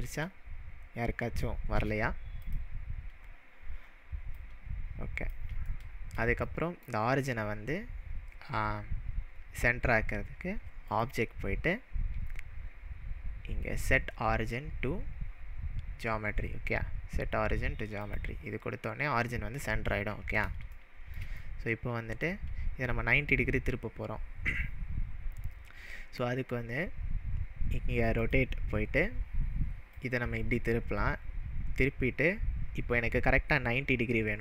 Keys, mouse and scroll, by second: 1.5-2.0 shift+middle click, 2.4-4.4 drag, 5.7-6.2 shift+middle drag, 10.9-14.0 drag, 18.0 click, 20.8-21.3 shift+middle drag, 28.2-30.1 drag.